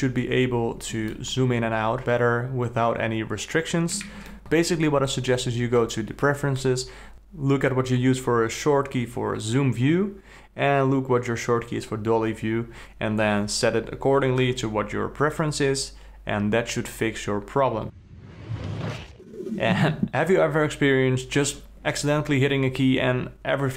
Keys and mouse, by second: 1.2-4.0 ctrl+middle drag.